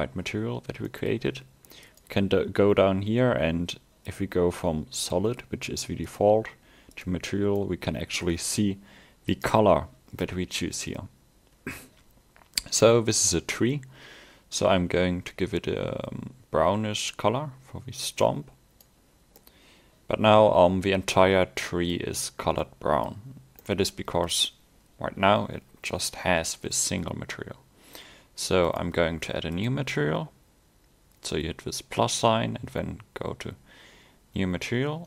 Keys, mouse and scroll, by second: 0.7 scroll up 1, 0.9 middle click, 1.9 click, 6.1 click, 7.6 middle click, 9.4 click, 19.4 middle click, 22.5 scroll up 1, 22.7 middle click, 23.4 scroll down 1, 23.7 middle click, 28.7 click.